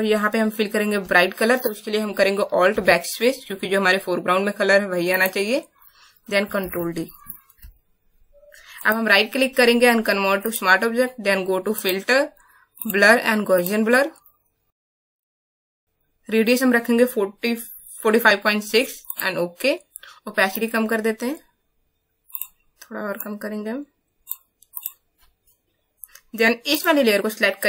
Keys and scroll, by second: 2.6 alt+BackSpace, 6.6 ctrl+d.